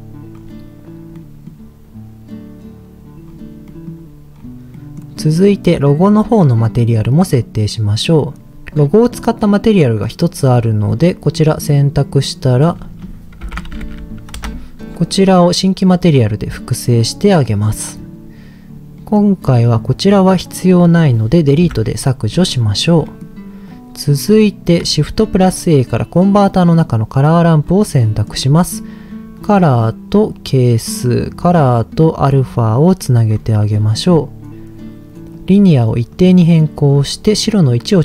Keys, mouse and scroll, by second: 0.3-1.1 scroll up 2, 1.1 middle click, 3.2-3.6 scroll down 3, 3.6 middle click, 4.4-4.7 scroll down 1, 4.7 middle click, 5.3 click, 7.3-8.5 drag, 9.1 middle click, 10.4-11.7 drag, 12.6-14.4 drag, 13.8 o, 16.0 click, 19.0 middle click, 19.6 click, 21.6 Delete, 22.7-23.1 scroll down 2, 23.1 middle click, 23.7 click, 25.2 shift+a, 28.0 middle click, 29.4-30.7 drag, 31.5-33.0 drag, 33.3-33.7 scroll up 2, 33.7 middle click, 33.9-34.5 scroll up 2, 35.3 click, 36.8 click.